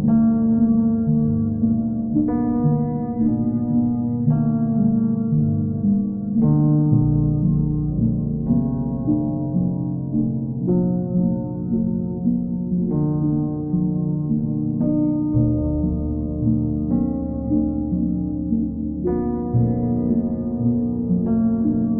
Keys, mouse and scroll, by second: 1.7 shift+click, 2.2 alt+click, 6.9 alt+click, 7.6 alt+click, 9.8 ctrl+click, 10.3 ctrl+click, 10.9 w, 13.2 click, 13.8 ctrl+click, 14.7 q, 20.0 click, 20.4 shift+click.